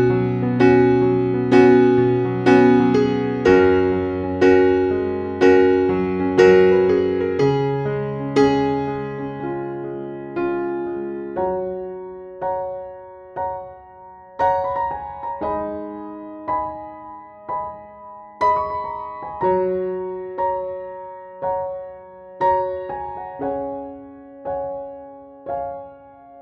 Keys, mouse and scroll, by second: 0.0-1.0 typing, 2.7 click, 4.0 Down, 4.2 typing, 5.3 Down, 5.8 typing, 9.4 Down, 10.3 typing, 12.5 Down, 13.8 typing, 15.4 z, 17.1 Up, 20.7-21.9 typing, 23.4 Up.